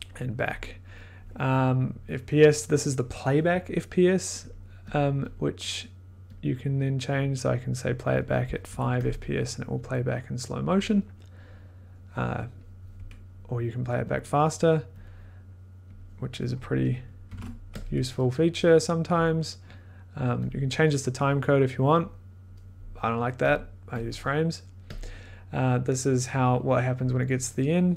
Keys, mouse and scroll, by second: 0.5 click, 4.5 click, 4.9 click, 5.3 click, 6.3 click, 8.6 5, 9.0 click, 9.8 click, 14.0 click, 14.1 click, 15.0 click, 16.0 click, 17.0-17.8 typing, 17.8 click, 19.2 click, 24.0 click, 27.0 click.